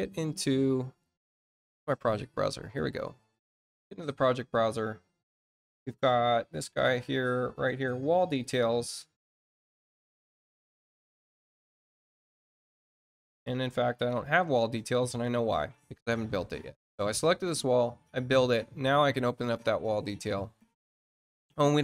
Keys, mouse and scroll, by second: 2.5 click, 8.3 click, 10.5 click, 12.9 click, 13.4 click, 16.9 click, 19.3 click.